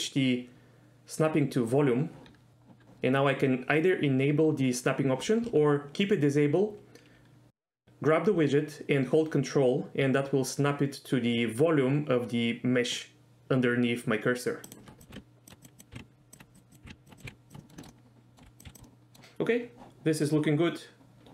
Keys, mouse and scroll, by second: 7.6 g, 14.7 ctrl+click, 15.0 click, 15.1 g, 15.6 click, 15.8 click, 15.9 g, 16.3 ctrl+drag, 16.5 click, 16.8 g, 17.0 ctrl+drag, 17.2 click, 17.2 g, 17.6 middle drag, 17.8 shift+middle drag, 18.1 middle drag, 18.4 r, 18.6 click, 18.6 s, 18.7 drag, 18.8-19.1 middle drag.